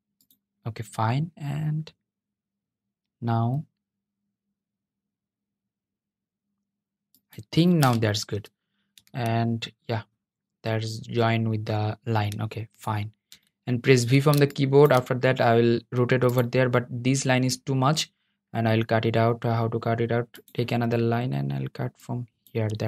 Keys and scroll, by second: 20.2 \.